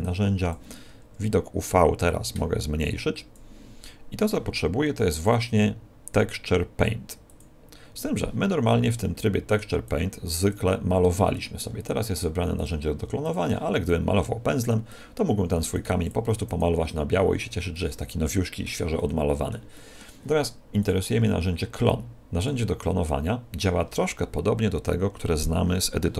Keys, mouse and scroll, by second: 2.0 click, 5.1 click, 8.9 middle click, 9.8 click, 11.6-12.0 scroll up 9, 12.5 click, 13.8 click, 17.7 middle click, 18.9 middle click, 20.7 click.